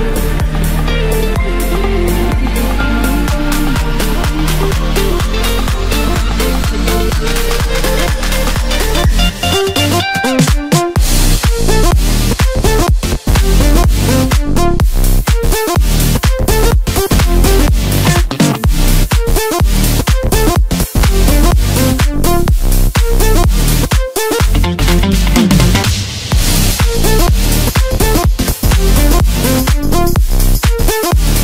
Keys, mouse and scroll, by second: 0.2 KP_7, 1.4 middle click, 2.1-2.9 scroll up 2, 2.9 e, 4.7 s, 6.0 e, 8.0-8.3 scroll down 1, 8.3-9.4 middle drag, 9.4 s, 11.7 e, 12.2 s, 13.4 e, 13.8 s, 16.6 e, 19.6 Tab, 19.8 scroll down 4, 20.1-21.2 middle drag, 21.2 click, 21.6-22.4 scroll up 1, 22.4 KP_7, 23.7-24.0 scroll up 2, 24.4-25.3 scroll down 3, 25.3-26.0 scroll up 1, 26.0 Tab, 27.3 click, 27.8 scroll up 1, 28.9 3, 29.2 click, 30.8 i.